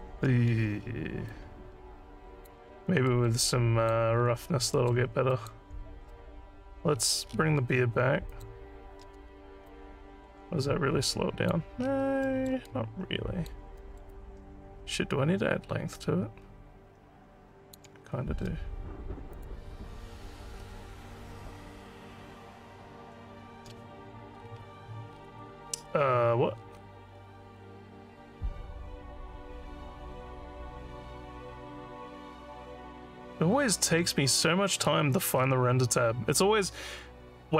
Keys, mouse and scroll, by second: 0.9 alt+middle click, 1.3-2.5 alt+drag, 3.1 alt+middle click, 3.4 alt+click, 4.1 alt+scroll down 3, 4.7 alt+middle click, 5.3 alt+click, 7.0-7.3 scroll down 2, 8.3 click, 9.4 alt+scroll up 1, 9.7-11.5 alt+drag, 11.8 scroll down 3, 12.2 alt+middle click, 12.7 alt+click, 13.8 alt+middle click, 14.1-17.7 alt+drag, 19.3 click, 20.6 scroll down 3, 21.9-22.4 scroll down 5, 24.3 scroll down 3, 25.1-25.8 scroll down 5, 26.8-27.5 scroll down 4, 27.5 scroll down 4, 34.9 scroll down 6, 35.4 scroll down 1.